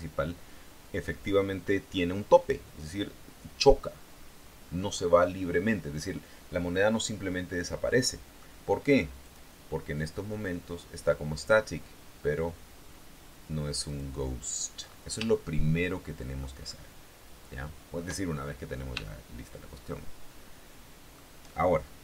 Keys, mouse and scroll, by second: 7.7-8.8 middle drag, 9.4 click, 14.1 click, 15.5-16.8 shift+middle drag, 16.9-18.3 shift+middle drag, 18.5 shift+scroll down 2, 19.2-21.5 shift+middle drag.